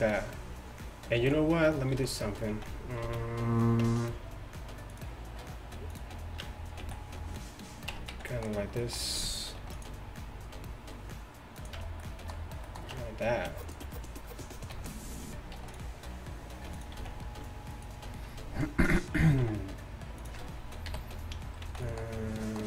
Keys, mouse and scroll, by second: 1.2 z, 2.0 z, 2.6 z, 3.1 z, 3.9 Tab, 5.0-6.5 drag, 6.5 Tab, 6.9 z, 8.0 Tab, 8.2 z, 9.6 ctrl+r, 11.8 Tab, 13.0 Tab, 13.7-15.6 drag, 14.8 f, 15.6 ctrl+r, 17.0 z, 19.5 x, 20.9 KP_7, 21.7 z.